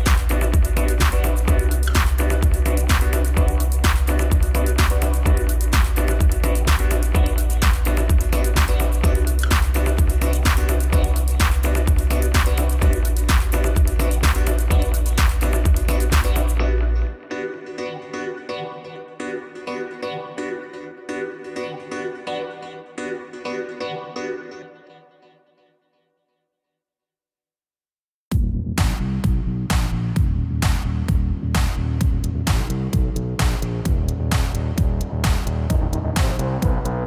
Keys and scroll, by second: 4.1 7, 7.2 a, 9.1 r, 25.6 alt+a, 32.9 Tab.